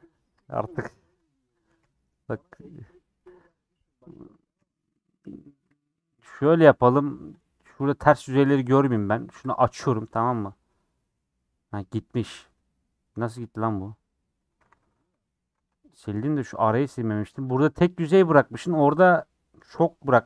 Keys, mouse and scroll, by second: 0.0 click, 0.5 scroll down 1, 0.6-1.8 middle drag, 1.8 /, 2.2 middle click, 2.7 /, 2.9 middle click, 3.3-4.1 scroll up 4, 3.5 middle click, 4.1 middle click, 5.1 scroll down 2, 5.2 middle click, 5.7 alt+z, 6.1 alt+z, 9.4 click, 9.9-14.7 middle drag, 14.7 a, 15.3 alt+j, 16.2 2, 16.6 click, 18.1 shift+click, 19.7 shift+click.